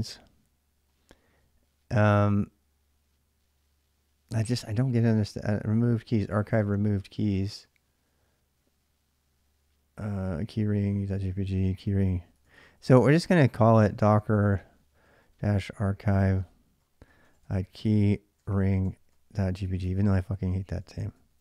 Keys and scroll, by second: 12.1-21.4 typing.